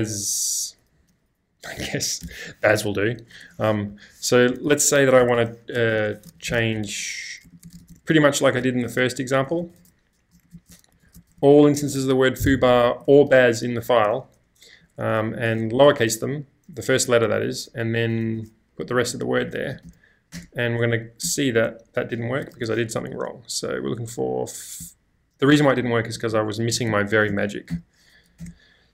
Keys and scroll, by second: 0.0-0.7 typing, 3.9 shift+;, 5.2 Escape, 5.3 Escape, 5.8-9.4 typing, 13.9-15.6 typing, 18.2-23.0 typing, 20.4 Return, 24.8 Left, 25.1 Left, 25.3 BackSpace.